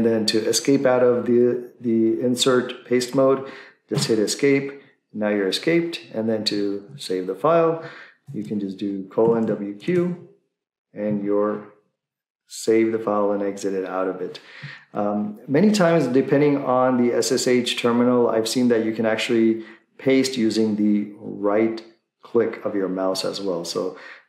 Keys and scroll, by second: 3.9 Escape, 8.3-9.9 typing, 9.9 Return.